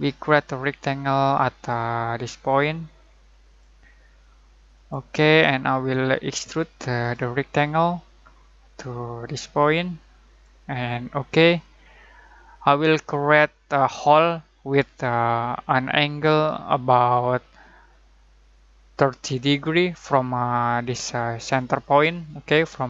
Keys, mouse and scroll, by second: 1.7 typing, 3.4 click, 6.9-7.6 typing, 9.2 typing, 9.3 click, 11.8 middle click, 12.5-13.0 scroll up 1, 13.3-13.8 scroll down 1, 15.9 typing, 22.4 shift+Num_Lock, 22.4 scroll down 1, 22.4-22.8 typing, 22.5 middle click, 22.5-22.8 shift+middle drag.